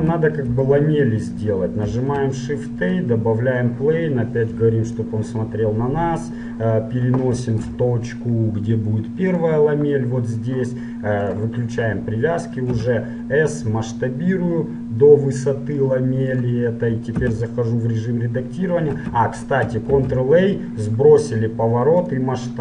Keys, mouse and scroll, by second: 0.2 z, 2.0 shift+a, 5.0-7.1 drag, 7.9 g, 11.6-13.4 drag, 13.0 s, 17.4 Tab, 19.0 Tab, 20.1 ctrl+a.